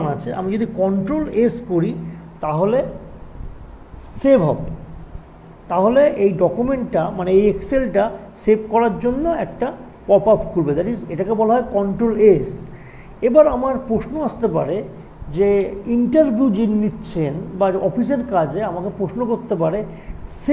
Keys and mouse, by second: 0.9 click, 0.9 typing, 1.3 ctrl+s, 13.1 click, 13.1 typing.